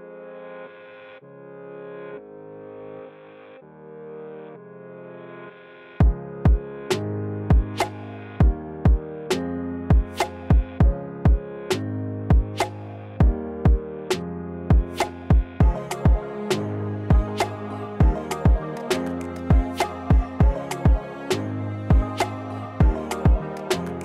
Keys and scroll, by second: 0.4 3, 3.0 s, 11.9 s, 16.1 z, 16.6 s.